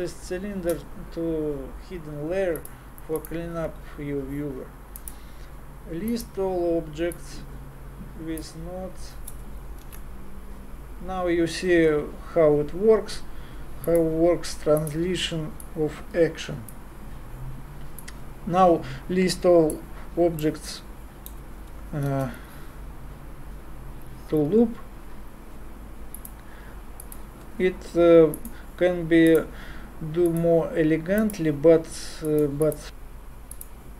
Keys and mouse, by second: 5.0-9.8 drag, 9.8 shift+a, 15.6-17.5 drag, 18.0-20.6 drag, 22.1 shift+a, 28.3-33.9 drag.